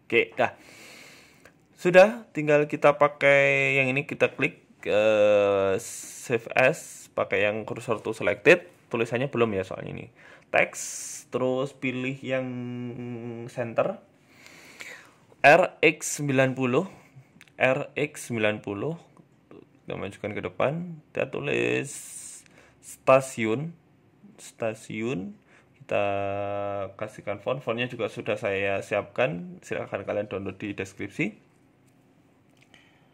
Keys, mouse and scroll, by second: 0.7-1.1 scroll down 2, 0.7 KP_1, 1.1 shift+middle click, 1.5 shift+a, 2.9 right click, 3.4 Tab, 3.6 right click, 4.0 shift+a, 6.1 shift+s, 7.1-7.5 scroll up 2, 7.3 shift+middle click, 7.5 shift+a, 11.5 click, 12.0 click, 13.1-14.0 scroll up 2, 13.6 r, 16.2 ctrl+z, 16.6 shift+middle click, 16.9 r, 18.8 middle click, 19.5 g, 20.5 middle click, 20.8 KP_1, 21.1 Tab, 21.9 ctrl+a, 22.5-23.9 typing, 24.6 Tab, 26.6 click, 27.2 click, 31.7 scroll up 3, 32.2-32.7 scroll up 2, 32.4 shift+middle click, 32.8 s.